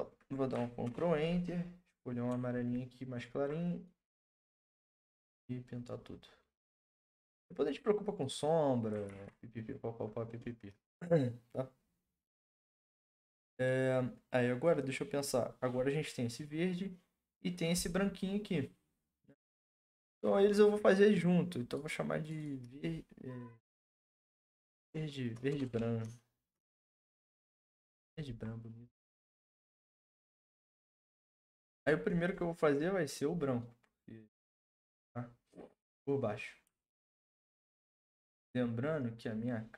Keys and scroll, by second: 0.9 ctrl+Return, 9.1 ctrl+d, 23.8-25.7 typing, 26.8-28.3 typing.